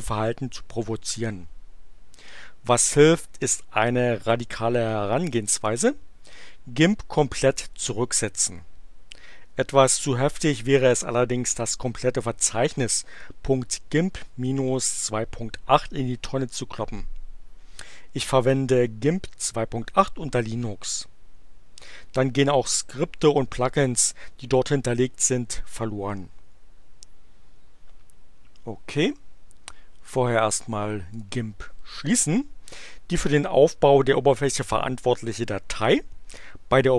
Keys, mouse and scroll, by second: 28.9 click, 30.0 click, 31.1 click.